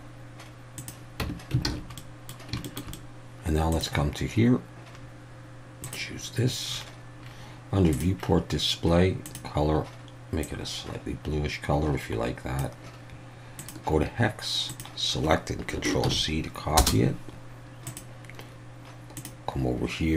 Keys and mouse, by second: 1.2 Tab, 1.7 alt+a, 2.0 middle click, 2.6 shift+middle click, 2.9 middle click, 5.9 click, 8.0 drag, 9.3 click, 17.9 click, 19.2 drag.